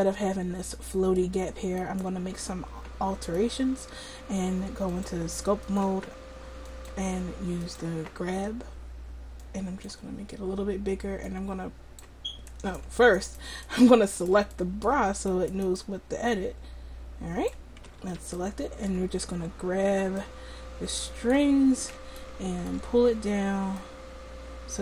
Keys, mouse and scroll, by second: 1.8-3.5 drag, 3.5 middle click, 6.2 click, 10.1-12.5 drag, 12.5 middle click, 13.3-14.6 right drag, 13.7-15.4 middle drag, 18.1 ctrl+z, 20.2-22.2 drag, 23.8-24.8 drag.